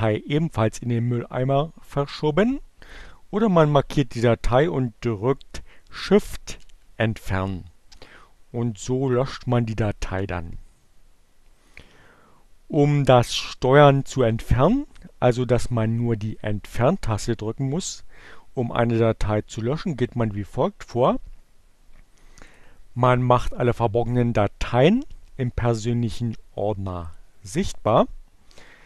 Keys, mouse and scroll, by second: 1.9 click, 6.7 shift+Delete, 8.9 click, 11.9 click, 22.1 click, 27.2 click.